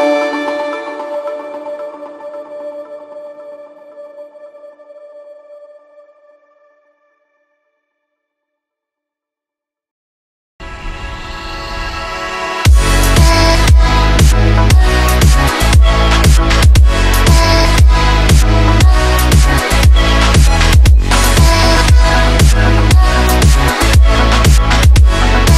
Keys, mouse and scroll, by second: 0.6-2.1 shift+drag, 2.2 space, 2.4 click, 2.6-3.0 space, 3.4 click, 3.7 space, 4.3 click, 5.5-7.0 typing, 8.0 Left, 8.3 space, 8.7 Right, 10.5 click, 14.5 shift+5, 15.6 click, 18.5 shift+o, 19.4 f, 19.6 f, 21.2-22.8 drag.